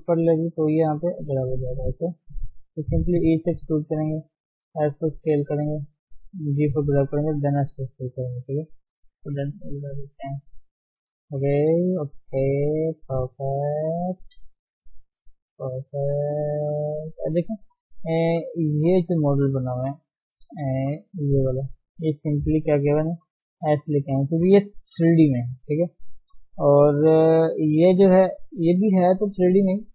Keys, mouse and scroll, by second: 1.5-3.0 scroll down 4, 1.8 shift+middle click, 3.0 e, 7.0 g, 8.7 KP_3, 9.3-9.6 scroll up 1, 10.6 shift+z, 11.2 shift+middle click, 12.1 shift+z, 13.2 shift+z, 14.8 KP_1, 15.6 scroll up 1, 16.1 shift+middle click, 16.5-17.0 shift+scroll up 2, 17.1 scroll down 3, 17.8 shift+middle click, 18.2-18.8 scroll up 2, 18.4 shift+middle click, 19.1 Tab, 19.8 click, 21.1 shift+h, 21.6-23.5 scroll down 4, 23.5 click, 24.2 d, 24.3-25.8 scroll down 3, 25.8 KP_3, 26.2 scroll up 1, 26.5-27.0 scroll down 4, 27.4-27.8 scroll up 3, 27.8 shift+middle click, 28.1 scroll up 1, 28.5 click, 28.8-29.9 shift+middle drag.